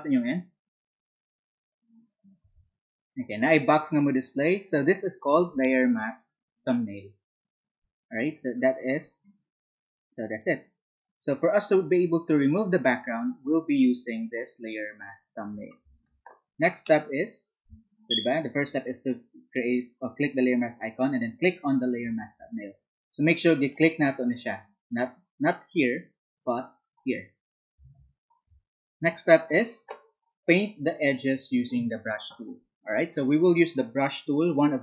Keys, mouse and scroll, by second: 23.2 alt+Tab, 23.9 Tab.